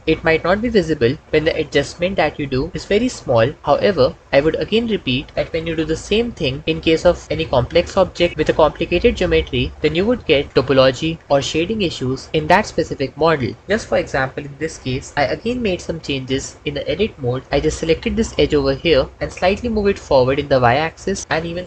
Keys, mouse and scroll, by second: 4.6 Tab, 6.6 g, 7.2 y, 8.7 Tab, 10.5-12.3 drag, 17.5 Tab, 19.1 g, 19.5 y.